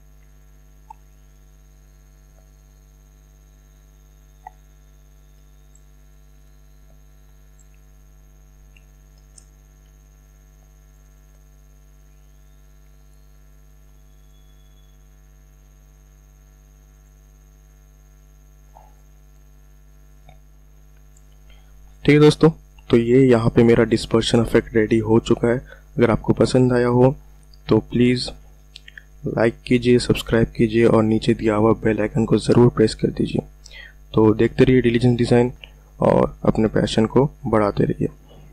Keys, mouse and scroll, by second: 4.5 click, 6.0 alt+click, 6.4 click, 7.9 ctrl+alt+scroll down 1, 9.0-9.4 ctrl+alt+scroll up 1, 10.8 alt+click, 14.1 click, 15.4 alt+click, 16.1 click, 17.0 alt+click, 18.1 click, 19.0 ctrl+alt+scroll down 1.